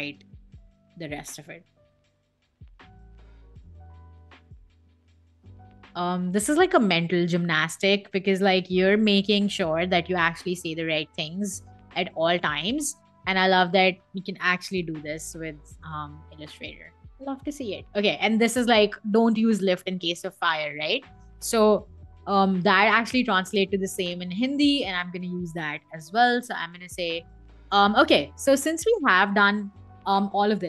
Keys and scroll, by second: 1.3 l, 1.6 g, 2.8-4.6 typing, 5.7 Escape, 14.2 i, 15.2 v, 25.8-28.2 typing, 28.5 Escape.